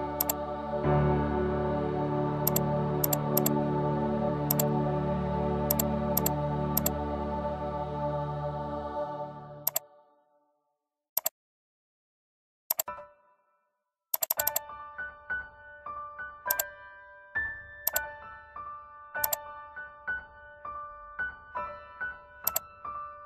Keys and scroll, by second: 15.6 ctrl+=.